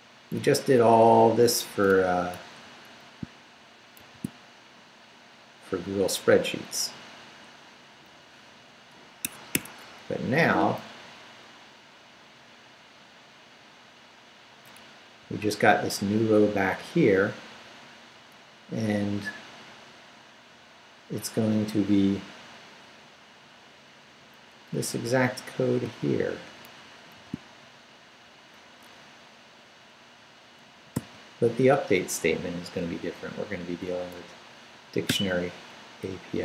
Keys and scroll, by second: 0.8 Up, 2.1 Down, 3.2 shift+Down, 4.0 shift+v, 4.3 shift+Down, 6.7 Down, 9.2 Escape, 10.4 Up, 14.8 Down, 16.2 Down, 19.1 Left, 21.7 Down, 24.5 Up, 25.8 shift+Up, 27.1 shift+v, 27.6 shift+Down, 28.4 Down, 30.9 y, 31.8 Up, 34.0 Up, 35.9 Up.